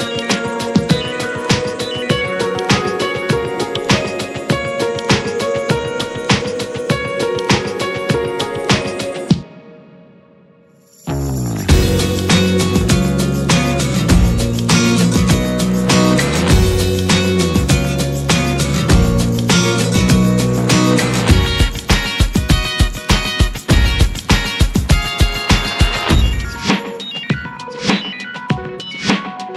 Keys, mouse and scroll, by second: 1.0-4.5 drag, 4.8-10.3 drag, 10.6 click, 11.0-13.2 drag, 13.7-18.1 drag, 20.7 click, 21.5 scroll up 3, 22.2 `, 23.3-26.3 middle drag, 26.3 Delete, 26.7-29.5 drag.